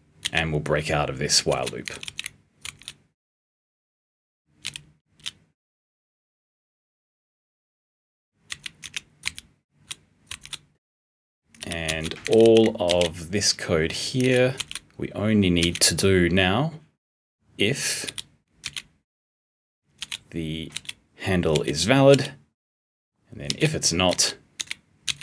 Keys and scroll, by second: 1.8 *, 3.4 r, 4.5 l, 8.2-9.7 typing, 11.2-12.8 typing, 14.1 p, 14.5 b, 15.5 b, 18.0 p, 18.5 b, 19.9 l, 23.8-25.2 typing.